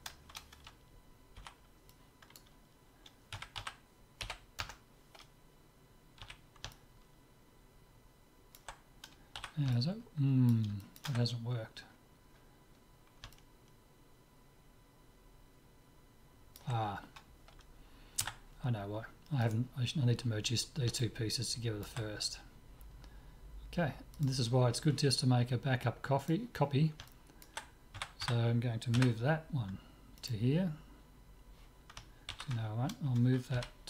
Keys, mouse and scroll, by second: 1.4 b, 3.4 s, 6.3 z, 6.8-8.7 middle drag, 9.4 z, 9.8-15.3 middle drag, 12.8-13.4 scroll down 1, 18.2 Tab, 18.9 middle click, 19.5-20.5 drag, 20.5 right click, 21.1 click, 21.4-22.8 middle drag, 24.3-25.9 drag, 26.3-28.0 drag, 27.2-29.2 middle drag, 28.0 a, 28.4 a, 29.0 m, 32.4 ctrl+z, 33.6 m.